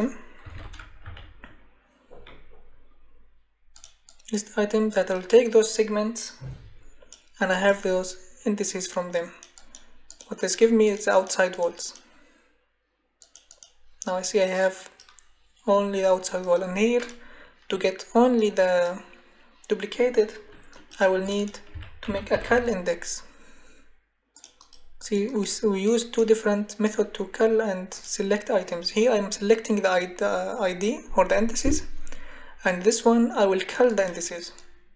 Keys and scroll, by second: 0.1-1.0 typing, 21.5-22.8 typing.